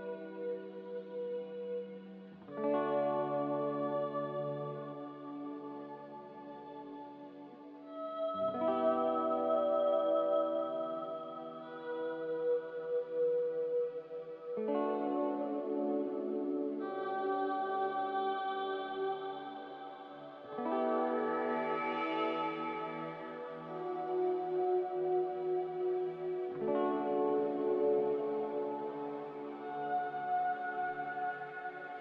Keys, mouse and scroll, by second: 30.7 a.